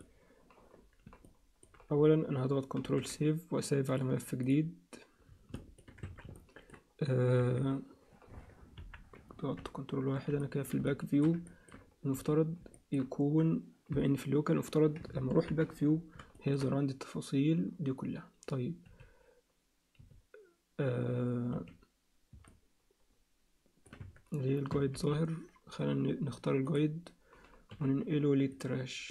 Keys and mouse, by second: 1.3 alt+middle click, 3.1 ctrl+shift+s, 5.5 alt+shift+middle click, 6.0 Tab, 6.3 alt+middle click, 7.4 KP_3, 8.8 ctrl+KP_1, 10.4 ctrl+alt+middle click, 10.9 alt+shift+middle click, 11.5 ctrl+middle click, 12.1 z, 12.7 ctrl+alt+middle click, 15.3 ctrl+KP_1, 16.3 alt+shift+middle click, 18.8 z, 20.0 z, 21.5 z, 22.4-23.9 alt+middle drag, 24.0 Tab, 24.9 alt+h, 26.7 click, 27.7 m.